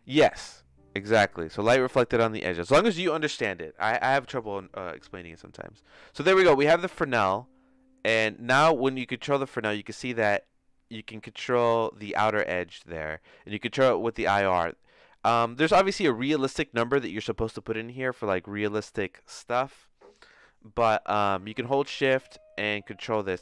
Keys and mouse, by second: 6.2 click, 7.0-11.1 drag, 14.2-17.9 shift+drag, 22.0-23.4 shift+drag.